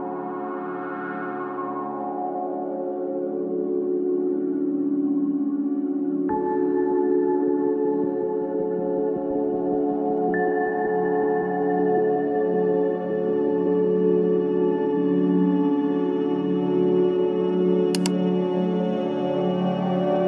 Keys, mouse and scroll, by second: 4.5 click, 5.3-7.0 scroll down 15, 7.0-7.7 drag, 7.7-10.0 scroll down 10, 10.0-13.1 drag, 14.1 click, 17.6-19.6 drag.